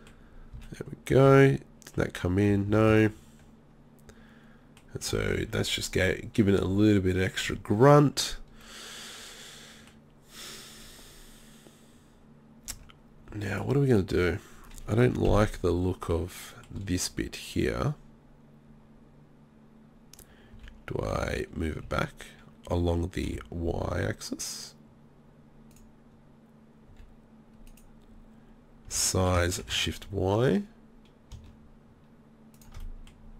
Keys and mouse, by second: 0.5 z, 1.3 z, 2.5 z, 2.7 z, 2.9 Tab, 8.7-9.0 middle drag, 12.7 Tab, 15.3 KP_3, 20.6 g, 26.9 s, 28.9 s, 32.9 middle click, 33.2 middle click.